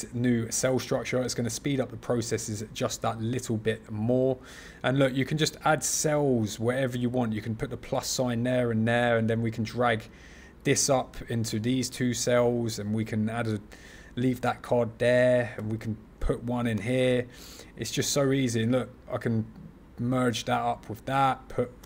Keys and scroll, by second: 15.5 super+c, 16.6 super+v, 21.7 super+v.